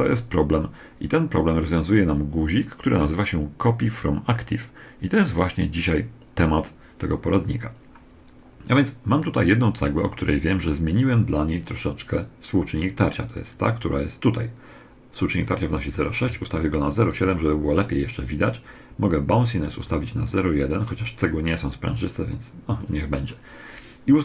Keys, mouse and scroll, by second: 13.2 right click, 15.8 click, 19.5 click.